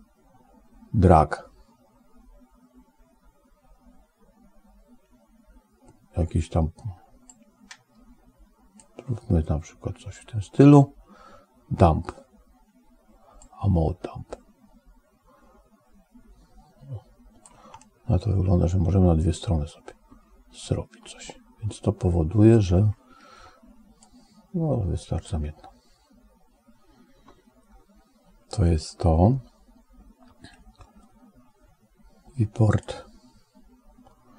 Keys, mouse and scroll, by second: 7.1-8.7 drag, 13.3-17.3 drag, 17.7-22.6 middle drag, 23.9-25.2 drag, 32.5 click.